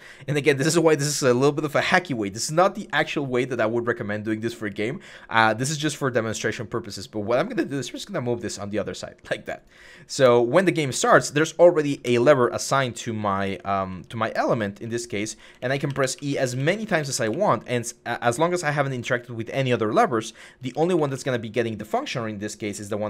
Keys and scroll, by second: 10.6 a, 11.9 e, 13.0-15.6 typing, 18.0-23.0 typing.